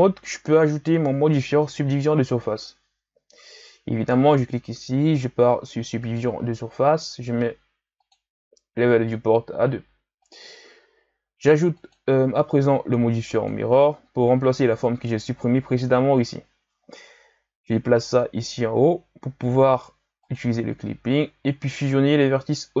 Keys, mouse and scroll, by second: 6.2-7.5 drag, 8.0-11.7 drag, 13.5-14.7 drag, 17.7-18.2 drag, 20.2 click, 21.9-22.8 scroll up 3.